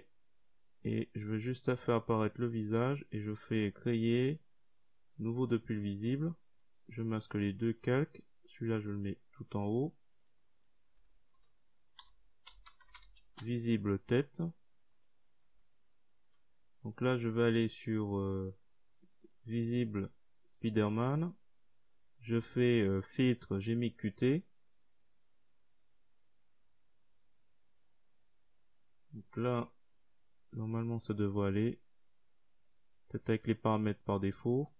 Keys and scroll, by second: 9.3-11.4 typing.